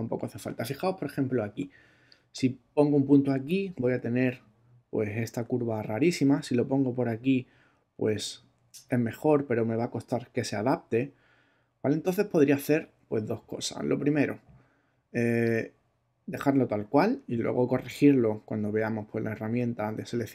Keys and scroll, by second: 5.9 super+z.